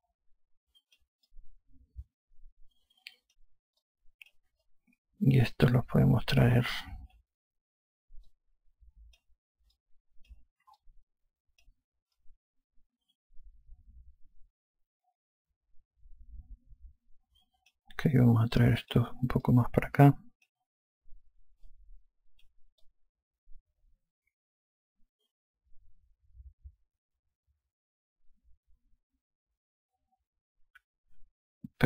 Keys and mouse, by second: 0.8 click, 2.2 alt+click, 4.7 click, 5.5 alt+click, 9.2 click, 10.6 alt+click, 13.1 alt+click, 19.5 click, 20.4 alt+click, 22.6 click, 23.7 alt+click.